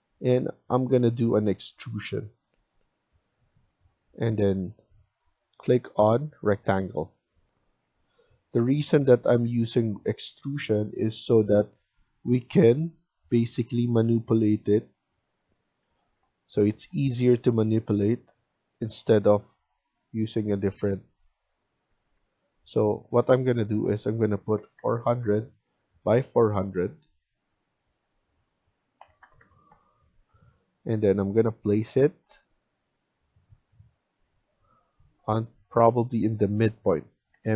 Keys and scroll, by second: 15.7 Escape, 16.0 Escape, 16.3 Escape, 21.7 Escape, 22.1 Escape, 24.2-25.2 typing, 25.6 Escape, 25.8 Escape, 28.7-29.4 typing, 29.6 Return, 29.9 Escape, 30.3 Escape, 37.3-37.5 typing.